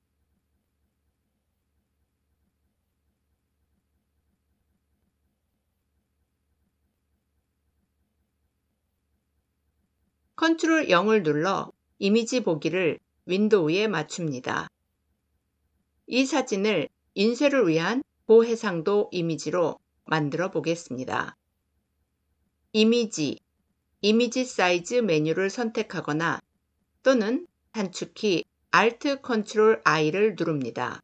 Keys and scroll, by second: 10.3 ctrl+0, 27.1 ctrl+alt+i.